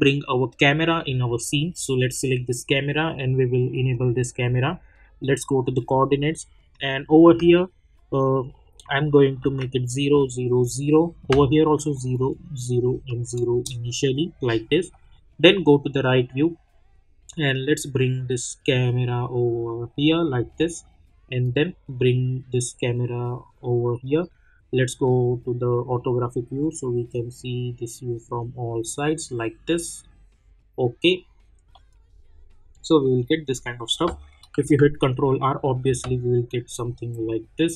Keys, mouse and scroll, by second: 0.5 click, 3.9 click, 8.1 click, 13.5 Return, 14.9 middle click, 16.3 scroll down 1, 17.6-20.5 drag, 20.5 scroll down 1, 21.4-23.5 drag, 23.5 scroll down 1, 24.0 middle click, 27.1-31.7 drag, 31.7 middle click, 34.6 ctrl+r, 37.4 click.